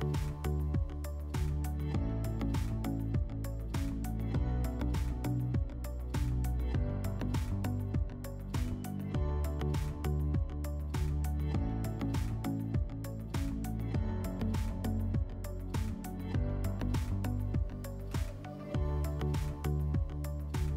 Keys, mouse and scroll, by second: 1.4-2.9 middle drag, 4.3-5.8 drag, 7.0 click, 11.9-13.5 drag, 15.2-16.8 drag, 17.6 middle click, 20.0-20.7 middle drag.